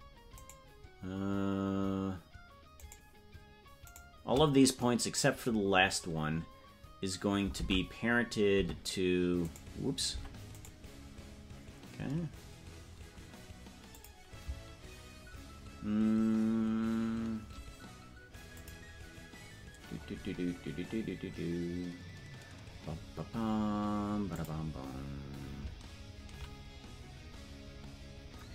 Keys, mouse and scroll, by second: 3.8 shift+right click, 7.5 ctrl+Tab, 10.6 right click, 13.9 click, 18.5 click, 19.7 scroll down 1, 20.8 scroll down 5, 24.3 click, 24.3 scroll down 1.